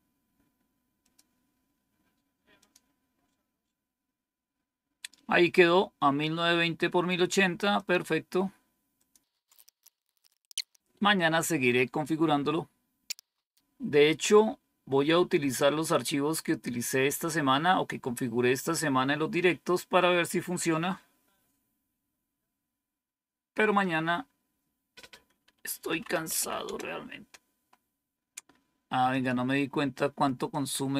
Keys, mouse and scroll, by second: 0.9 click, 2.5 click, 7.7 click, 8.9 click, 9.3-11.1 typing, 13.1 Return, 25.7 typing, 29.0 click.